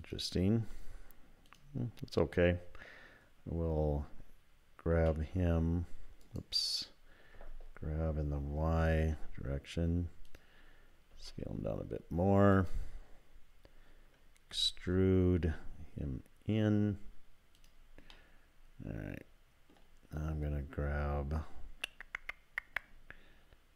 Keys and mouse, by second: 1.5 click, 4.9 s, 7.4 g, 11.1 s, 14.5 e, 18.2-19.8 drag.